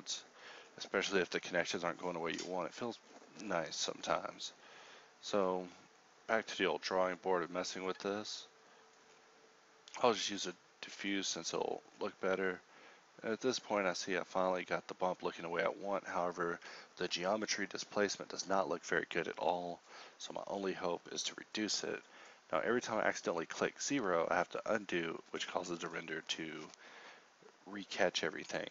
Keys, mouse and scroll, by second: 6.4 shift+a, 19.8 ctrl+z, 23.1 ctrl+z.